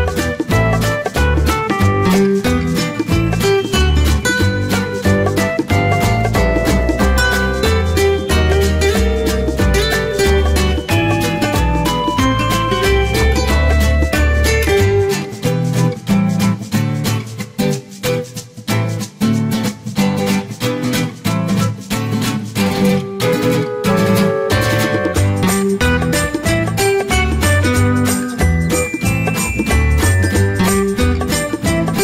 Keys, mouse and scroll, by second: 0.4 click, 6.7 click, 11.6 alt+click, 15.0 ctrl+d, 15.7 ctrl+d, 18.7 ctrl+d, 18.8-21.0 typing, 27.2 click.